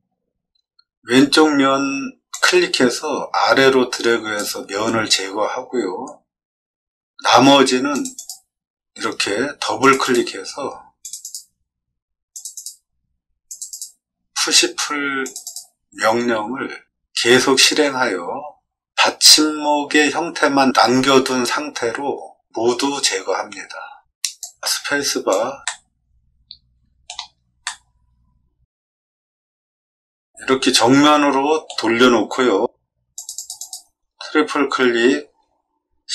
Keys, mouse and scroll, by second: 2.3-4.3 drag, 7.9 click, 8.1 click, 9.8 click, 10.0 click, 11.0 click, 12.3 click, 12.5 click, 13.4 click, 13.6 click, 15.2 click, 15.4 click, 24.4 click, 24.6 space, 25.2 click, 25.6-27.0 middle drag, 27.6-31.6 middle drag, 33.1 click, 33.3 click, 33.5 click.